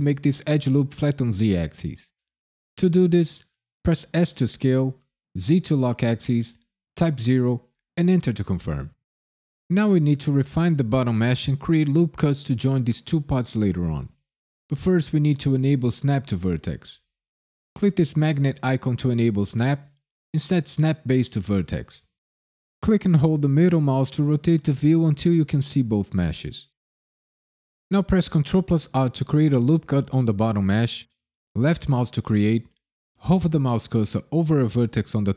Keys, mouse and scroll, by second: 4.1 s, 5.3 z, 7.1 KP_0, 7.9 KP_Enter, 17.8 click, 19.4 click, 22.8 middle click, 24.2 ctrl+middle click, 24.4 shift+middle click, 25.3 ctrl+middle click, 25.7 shift+middle click, 28.6 ctrl+r, 31.5 click.